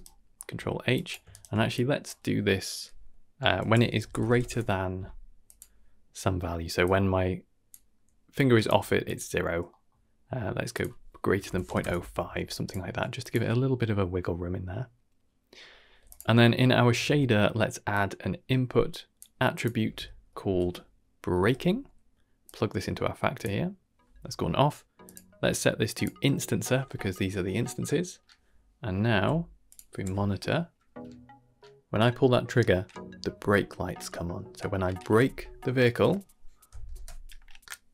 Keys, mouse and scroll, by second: 0.3 scroll up 2, 0.5 middle click, 0.9 click, 1.3-1.7 ctrl+right drag, 1.7-3.7 drag, 5.5-6.1 middle drag, 6.2-6.8 middle drag, 6.8 click, 7.7-8.3 middle drag, 8.3 click, 8.6-9.0 middle drag, 8.7 g, 9.7 middle click, 10.7-11.8 drag, 12.5 click, 12.9 g, 16.1 click, 16.3 middle click, 17.0 shift+a, 20.4 ctrl+c, 21.4 ctrl+v, 22.5-23.4 drag, 25.0-26.0 drag, 29.6 click, 29.6 n, 29.9 n, 36.9 shift+space.